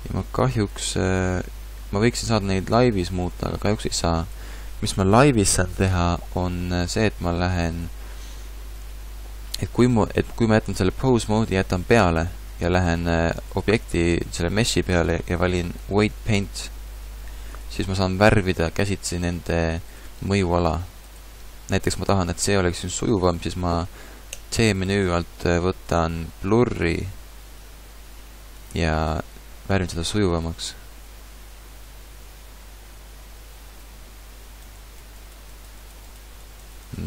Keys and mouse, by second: 13.5-15.3 drag, 18.6-19.9 middle drag, 19.9-22.3 drag, 24.4 t.